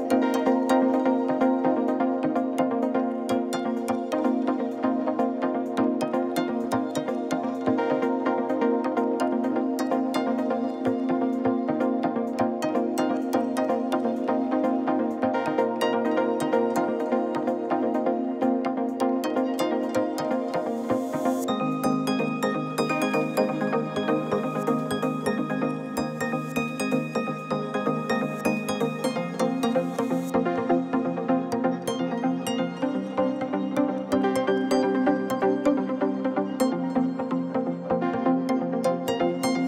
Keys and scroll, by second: 8.3 Tab, 8.7 a, 8.9 x, 11.3 1, 11.5 Return, 13.3 ctrl+a, 13.8 ctrl+a, 14.8 Tab, 15.2 ctrl+a, 20.4 Tab, 22.4 u, 26.0 alt+a, 26.6 l, 28.8 g, 32.8 g, 35.7 r, 35.9 9, 36.0 Return, 36.3 g, 37.5 Tab, 38.1 Tab.